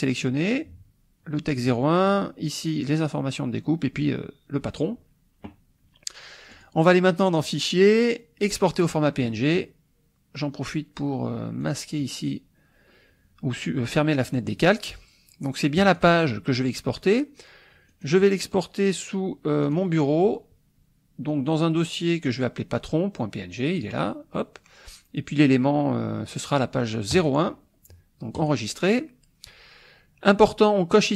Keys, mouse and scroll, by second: 6.5 click, 8.6 click, 11.6 click, 15.8 click, 17.9 click, 19.6 click, 23.7 click, 27.1 click, 28.3 click, 30.9 click.